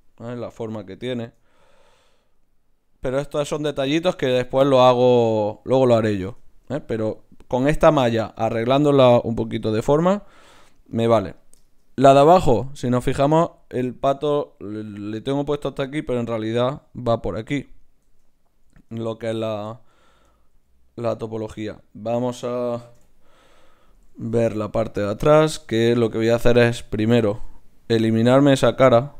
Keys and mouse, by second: 0.3-6.3 drag, 6.3 Tab, 10.4 Tab, 11.1-12.8 drag, 18.1 Tab, 18.9 ctrl+Tab, 23.0 KP_Divide, 24.3 ctrl+Tab, 25.1-27.8 drag, 27.4 x.